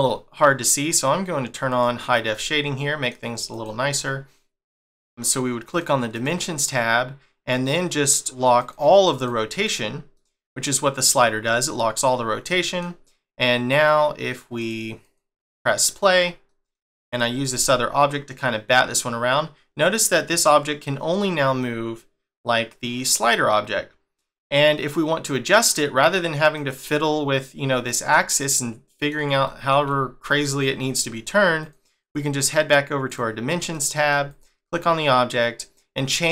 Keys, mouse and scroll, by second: 0.7 click, 2.3 middle click, 3.5 click, 4.0 middle click, 5.7 click, 6.1 click, 8.6 click, 9.1 click, 9.6 click, 10.1 middle click, 12.5 middle click, 14.6 click, 15.0 click, 15.9 click, 16.5 middle click, 17.1 click, 17.5 g, 28.1 middle click, 32.0 click, 33.1 click, 33.7 middle click, 34.3 click, 34.6 middle click.